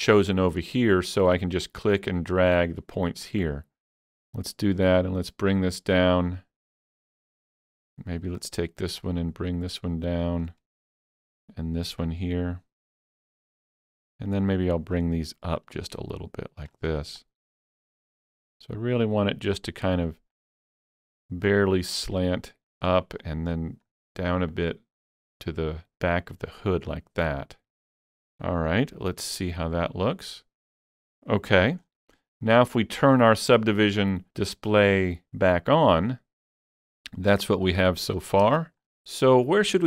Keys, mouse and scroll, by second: 1.7 alt+z, 1.7-27.4 drag, 1.7 shift+middle click, 17.5 click, 26.9-27.4 scroll down 1, 27.6-29.2 middle drag, 27.6 scroll down 1, 29.8-31.9 middle drag, 31.6 alt+a, 31.9 scroll up 2, 32.2 shift+middle click, 36.1-38.3 shift+middle drag, 36.1 scroll up 1, 36.2 click, 38.2-38.8 shift+scroll up 3, 38.6 shift+middle click, 39.5 shift+middle click, 39.5 scroll up 1.